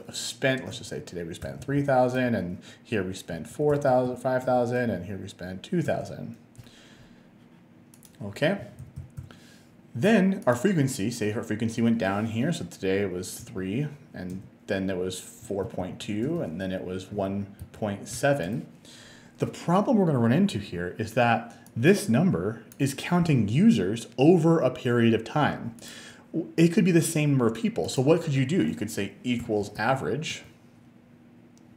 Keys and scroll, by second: 0.7 3, 1.5 0, 2.2 Return, 3.3-4.9 typing, 4.5 Return, 5.9 Return, 8.4-9.3 typing, 13.4 3, 14.3 Return, 15.2-18.1 typing, 18.5 Return, 29.2-30.4 typing.